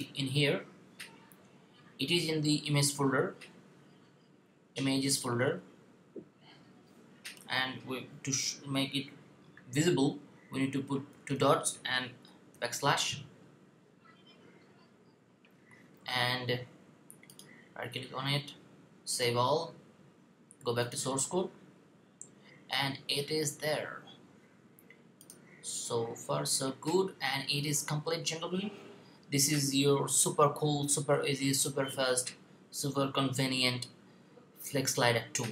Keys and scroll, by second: 11.0 typing, 12.4 typing, 15.2 typing.